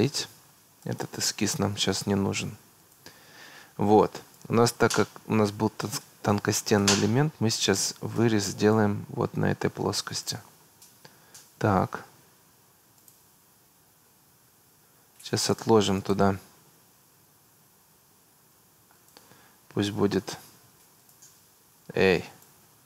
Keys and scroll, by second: 14.6 Escape, 21.6 Escape.